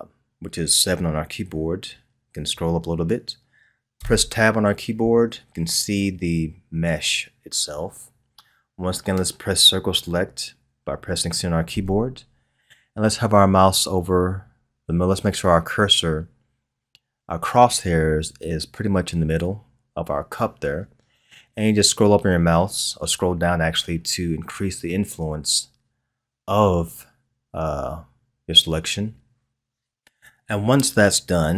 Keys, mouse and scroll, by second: 2.2-4.0 scroll up 2, 4.0 Tab, 11.7 c.